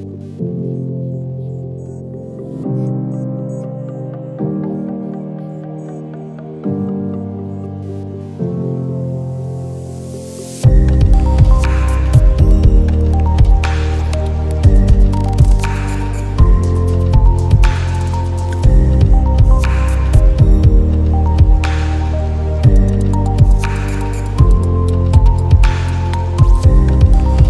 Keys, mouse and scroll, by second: 0.2 shift+click, 0.8 i, 1.4 click, 1.6 ctrl+z, 1.8 click, 3.0 click, 5.2 shift+click, 5.8 i, 6.1 click, 6.6 click, 8.9 click, 9.4 click, 9.9 click, 10.0 shift+click, 10.9 alt+scroll down 1, 11.0 space, 11.2 alt+scroll up 2, 11.4 space, 11.4 click, 13.9 shift+click, 14.1 i, 14.3 click, 15.2 click, 15.8 i, 16.0 click, 16.7 shift+click, 16.9 i, 17.2 click, 19.1 alt+scroll down 1, 19.9 click, 24.3 ctrl+z, 24.9 click, 25.5 click.